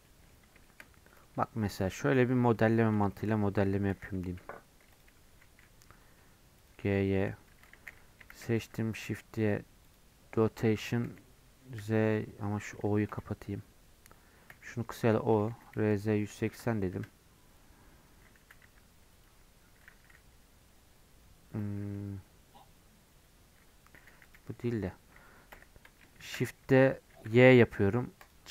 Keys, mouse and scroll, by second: 0.0-1.9 middle drag, 1.9 KP_7, 2.5 Tab, 3.0 shift+middle click, 3.9 d, 4.9 click, 5.2 g, 7.5 Tab, 7.7 a, 8.3 shift+d, 11.0 r, 14.5 o, 15.5 r, 18.4 g, 19.6 g, 26.1 shift+d.